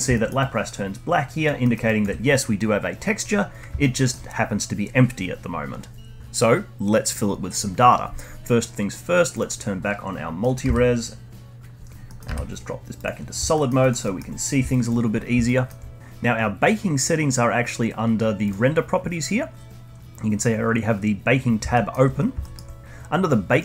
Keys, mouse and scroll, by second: 0.1 alt+middle drag, 0.4-1.6 alt+drag, 1.6 alt+middle drag, 1.8-3.8 alt+drag, 3.8-6.2 alt+middle drag, 9.7 click, 11.8 z, 12.0 middle click, 12.2 z, 13.5 alt+middle click, 13.8 alt+drag, 14.0-14.4 alt+middle drag, 14.4 scroll down 1, 14.7-15.4 alt+drag, 15.4-16.0 alt+middle drag, 18.4 click, 19.8-21.7 scroll down 1, 21.7-22.8 alt+middle drag, 23.5-23.6 drag.